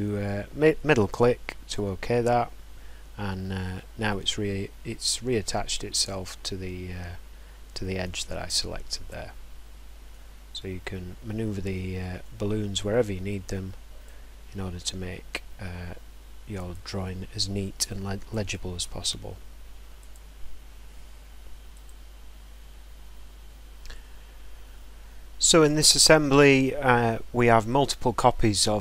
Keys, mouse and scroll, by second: 8.9 click, 9.2 scroll, 10.0 scroll up 3, 11.7 middle click, 12.3-12.6 scroll down 5, 16.5 click, 18.1 click, 18.8 right click, 21.7 middle click, 21.9 scroll down 3, 22.3-23.0 scroll.